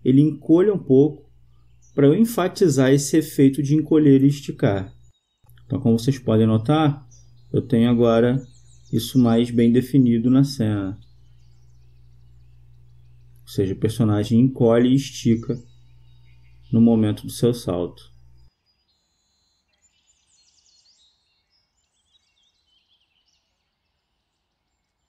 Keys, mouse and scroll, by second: 2.6-4.3 right drag, 4.3-6.1 drag, 6.9-11.3 drag, 18.4-22.0 drag, 22.5 click.